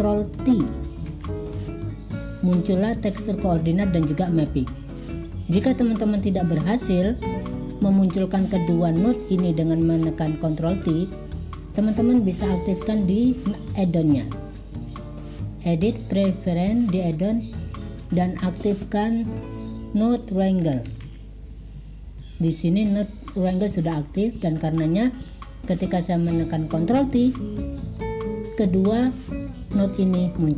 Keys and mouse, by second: 1.2 ctrl+t, 12.8-16.2 drag, 29.4-29.9 drag, 30.2 click.